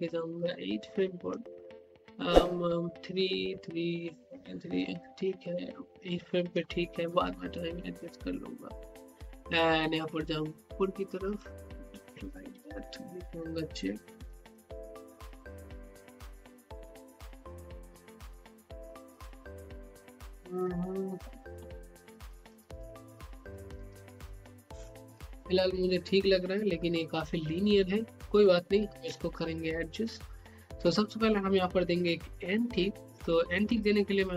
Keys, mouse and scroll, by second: 4.9-8.4 drag, 10.0-12.0 drag, 12.0-19.0 typing, 20.3-25.7 typing, 33.6-34.3 drag.